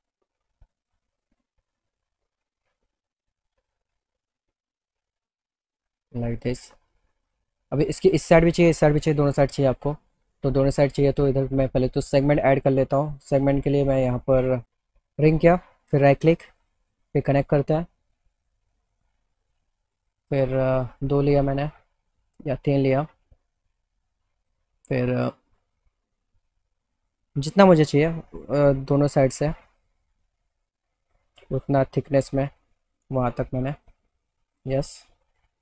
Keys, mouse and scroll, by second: 2.7 click, 3.2 right click, 9.9 click, 10.4 click, 11.5 click, 12.9 click, 14.2 click, 15.0 click, 15.5 click, 17.2 click, 19.2 middle click, 19.8 middle click, 20.5 click, 22.4 click, 23.6 click, 25.5-27.5 drag, 31.2-32.6 drag, 33.9 click, 34.6 alt+middle click.